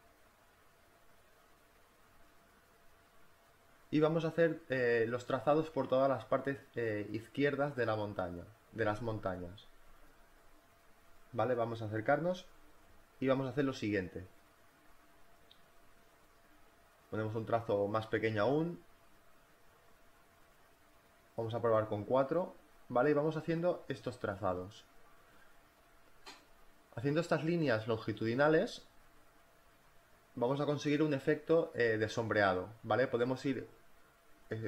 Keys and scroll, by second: 0.6 v, 1.8 z, 9.8 b, 11.1 z, 12.4 b, 14.2 space, 17.2 3, 19.2 BackSpace, 19.7 4, 33.8 space.